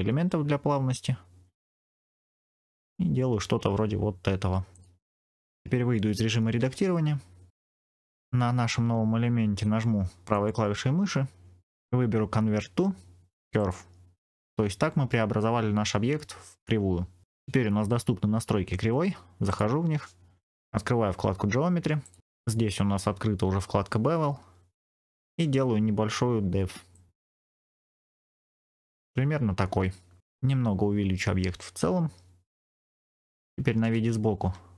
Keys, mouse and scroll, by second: 1.8-2.7 scroll down 1, 4.6 click, 6.5 Tab, 7.5 middle click, 10.2-12.3 drag, 10.2 right click, 12.3-19.4 right drag, 19.4 click, 21.9 click, 22.2-23.6 scroll down 4, 26.8-27.9 drag, 28.0-28.8 scroll down 3, 28.3 middle click, 30.9 s, 32.6 click, 33.7 KP_1.